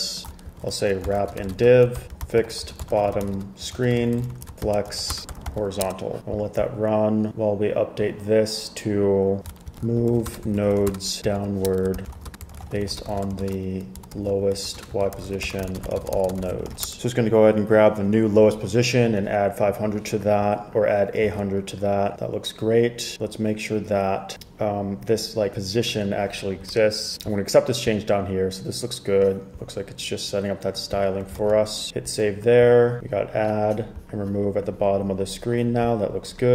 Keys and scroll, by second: 0.6 super+k, 0.8-6.1 typing, 9.7-17.4 typing, 26.8 BackSpace, 31.5 super+s.